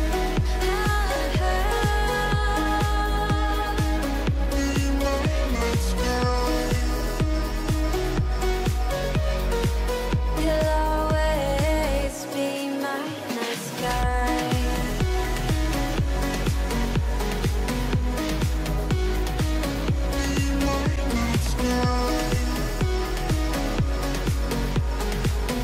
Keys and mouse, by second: 0.0 n, 2.1 ctrl+r, 4.2 alt+a, 5.0 shift+middle click, 6.7 ctrl+r, 9.5 alt+a, 12.0 click, 12.6 shift+click, 13.5 m, 15.7 shift+middle click, 17.3 k, 21.7 alt+a, 24.2 k.